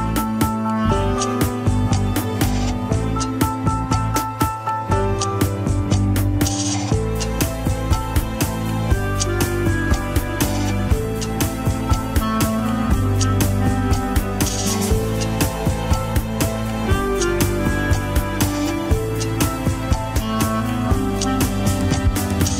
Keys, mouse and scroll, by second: 0.7 shift+click, 1.8 shift+h, 2.1 scroll up 4, 2.3 alt+z, 3.3 click, 4.2 s, 5.3 alt+z, 5.3-5.8 scroll up 3, 5.6 shift+middle click, 6.0 g, 7.5 click, 7.8 alt+z, 7.9 scroll up 2, 8.1 g, 8.7 alt+z, 9.0 click, 9.2 alt+z, 9.5 g, 10.0 KP_1, 10.3 alt+z, 10.8 click, 11.3 g, 12.3 ctrl+z, 13.6 ctrl+l, 14.3 g, 16.3 click, 16.7-19.8 typing, 17.4 click, 18.2 click, 19.5 alt+z, 20.6 scroll down 3, 20.9 alt+z, 21.3 click, 21.8 alt+z, 22.3 h.